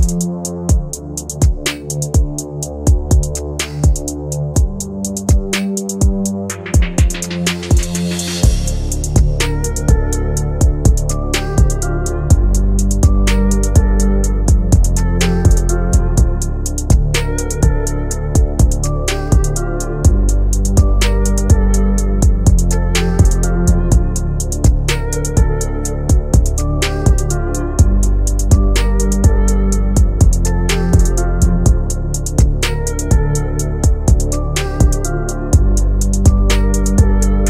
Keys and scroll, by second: 7.0 shift+F2, 12.0 F3, 25.6 shift+F2.